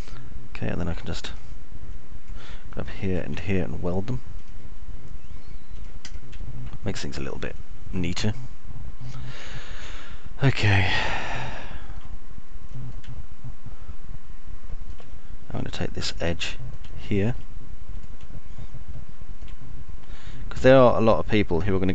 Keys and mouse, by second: 0.0-1.6 alt+middle drag, 4.5 ctrl+click, 8.0-9.0 alt+middle drag, 9.6-12.6 alt+middle drag, 13.1 alt+middle click, 14.5-16.6 middle drag, 18.6 alt+middle click, 19.8-21.0 alt+middle drag, 21.8 click.